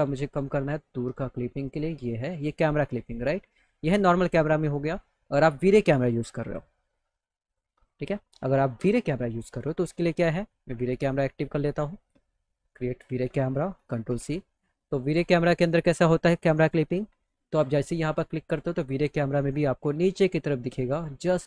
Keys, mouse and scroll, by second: 3.8 click, 5.3 click, 7.5 click, 7.7 click, 11.4 click, 12.7 click, 13.8 ctrl+c, 15.7 click, 16.5 click, 17.5 click, 19.3-21.3 drag.